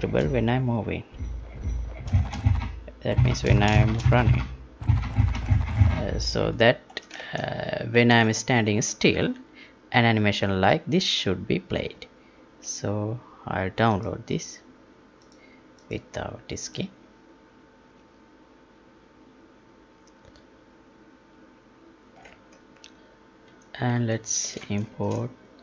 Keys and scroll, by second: 3.7 space, 6.8 ctrl+p, 7.3 alt+Tab, 22.5 alt+Tab, 24.7 alt+shift+Tab.